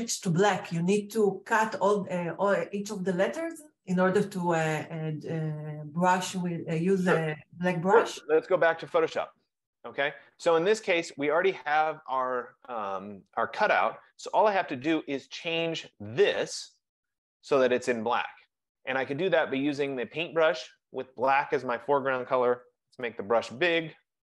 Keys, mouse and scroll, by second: 8.7 click, 15.6 click, 20.0 click, 22.7-24.2 typing, 23.2-24.2 drag, 24.0-24.2 F15.